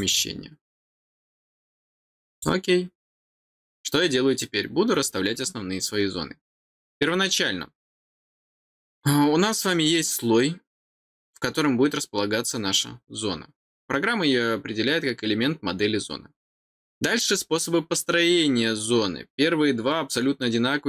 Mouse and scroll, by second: 2.3 click.